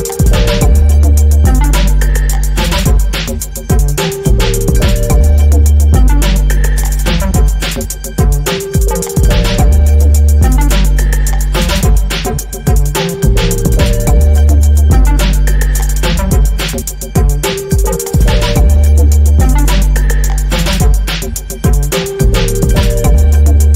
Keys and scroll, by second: 11.6 ctrl+g, 16.1 ctrl+g, 16.2 p, 20.1 Return.